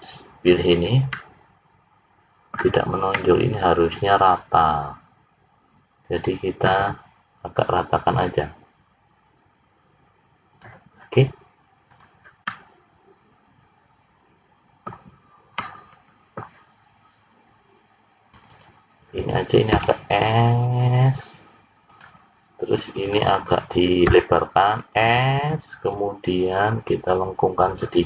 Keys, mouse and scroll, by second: 1.1 middle click, 3.0 middle click, 8.0 click, 11.8 click, 12.4 middle click, 18.3 click, 18.6 click, 19.7 s, 22.8 click, 23.1 click, 24.0 s, 25.9 click.